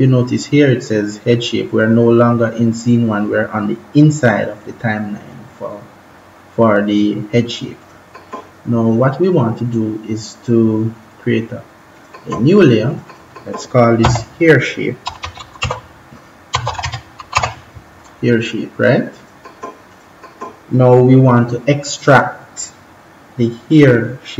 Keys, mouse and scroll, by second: 7.8 click, 11.9 click, 13.9-17.8 typing, 19.1 click.